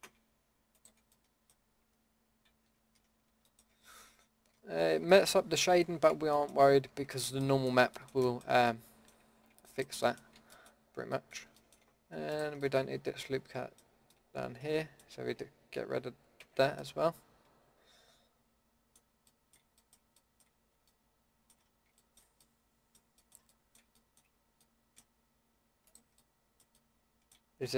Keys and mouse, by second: 2.5 ctrl+x, 3.7 Tab, 4.0 Tab, 4.5 Tab, 5.8 Tab, 6.7 Tab, 7.0 Tab, 10.9-11.2 middle drag, 12.3-14.5 middle drag, 16.4 ctrl+x, 18.6 middle click, 20.2-20.9 middle drag, 21.1-22.2 middle drag, 25.8-27.7 middle drag.